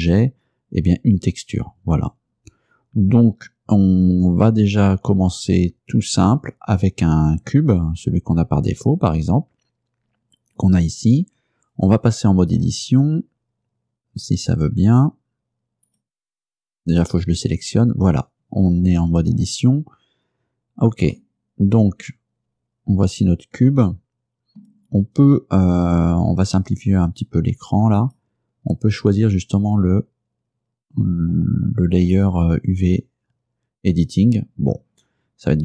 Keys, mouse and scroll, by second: 10.2-11.1 scroll up 6, 12.7 Tab, 15.9 click, 17.1 right click, 17.6 Tab, 21.2-24.8 middle drag, 28.1 click, 32.2 click.